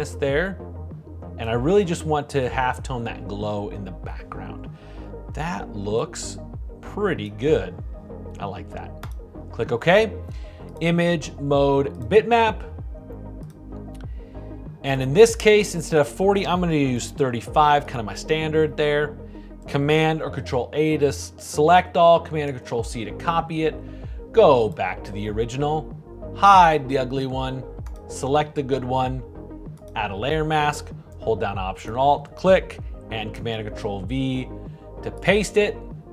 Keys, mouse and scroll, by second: 19.9 super+a, 22.6 super+c, 31.1-33.7 alt+drag, 34.1 super+v.